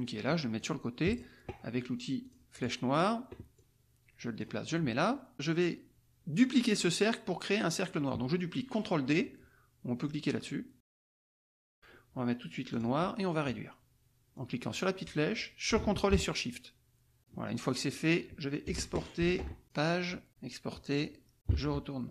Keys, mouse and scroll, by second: 0.9 click, 2.2 click, 2.6 click, 3.0 click, 3.5-4.5 drag, 4.8 middle click, 5.0 click, 11.1 click, 12.7 click, 14.3-17.3 drag, 19.2 ctrl+shift+e, 19.6 ctrl+shift+click, 20.3 KP_4, 20.9 click, 21.5 alt+Tab.